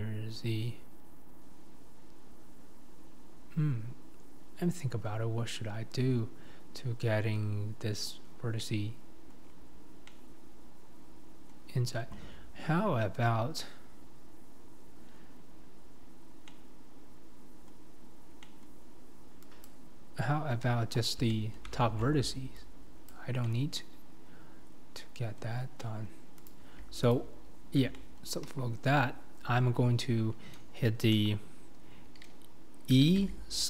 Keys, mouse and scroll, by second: 8.5 scroll up 2, 8.6 middle click, 9.4-10.1 scroll down 2, 10.1-13.5 middle drag, 13.5-14.2 scroll down 1, 14.2-14.8 scroll down 1, 14.8-15.7 scroll down 1, 15.7-16.0 scroll up 4, 16.5-19.7 middle drag, 19.7 click, 20.6 KP_1, 21.3 shift+middle click, 21.8 alt+z, 23.1 click, 23.3 scroll down 1, 23.4-26.5 middle drag, 26.5 click, 27.9 middle click, 28.5 KP_1, 29.1-31.1 scroll up 2, 31.1 KP_7, 33.0 e.